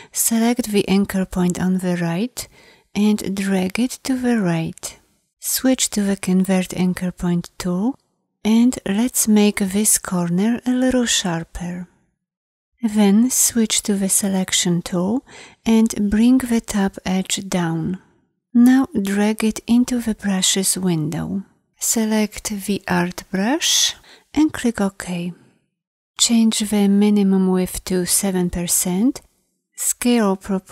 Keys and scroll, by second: 14.1 v.